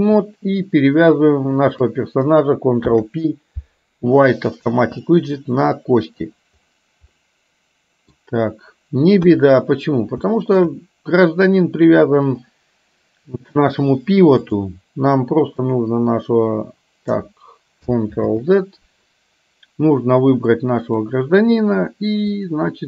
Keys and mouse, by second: 1.6 shift+click, 2.9 ctrl+p, 7.2-8.2 middle drag, 9.4 KP_1, 10.4 shift+middle click, 14.6 click, 15.7-17.4 drag, 18.4 ctrl+z, 20.9 click, 22.5-22.8 drag.